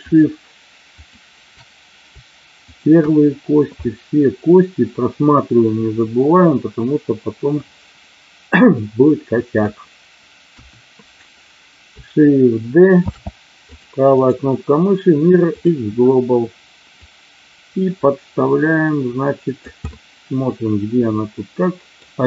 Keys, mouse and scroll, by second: 0.0 shift+click, 1.0 shift+click, 2.6 shift+click, 3.9-9.7 middle drag, 10.5 KP_1, 13.1 shift+d, 13.6 click, 16.8-19.6 drag, 19.9-22.0 middle drag.